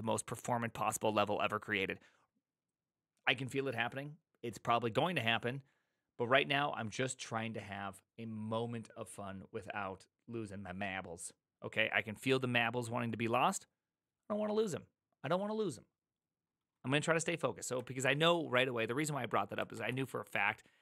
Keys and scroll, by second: 19.7 alt+{.